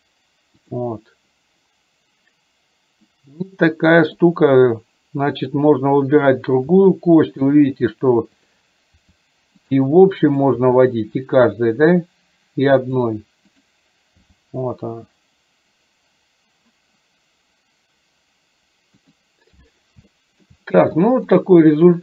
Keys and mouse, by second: 4.1 click, 5.4 click, 6.8 r, 9.0 r, 10.3 click, 14.3 g, 20.2 shift+middle click, 21.4-22.0 drag.